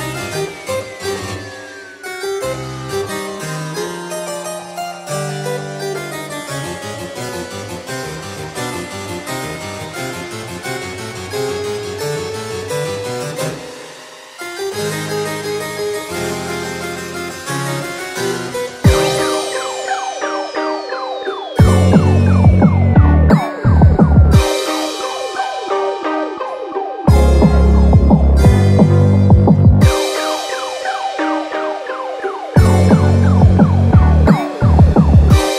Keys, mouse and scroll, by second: 0.7 click, 0.7 g, 0.8 g, 2.7 click, 2.7 g, 3.1 g, 5.4 click, 5.5 g, 7.0 click, 7.0 g, 7.1 g, 8.7 click, 8.7 g, 8.8 g, 10.1 click, 10.1 g, 12.1 click, 16.4 click, 16.5 g, 18.5 click, 18.5 g, 20.2 click, 20.2 g, 20.5 g, 22.0 click, 22.0 g, 22.2 g, 23.6 click, 23.6 g, 24.2 g, 26.7 click, 28.1 click, 28.1 g, 29.4 click, 29.4 g, 29.5 g, 31.0 click, 31.0 g, 31.1 g, 32.4 click, 32.4 g, 33.0 g, 33.8 click, 33.8 g.